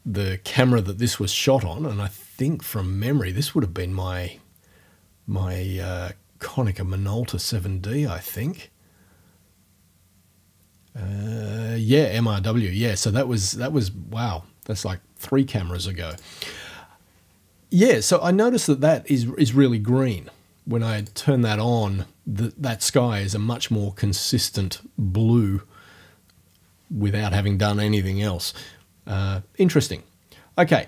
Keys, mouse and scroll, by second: 8.3 click, 16.1 click, 21.0 click.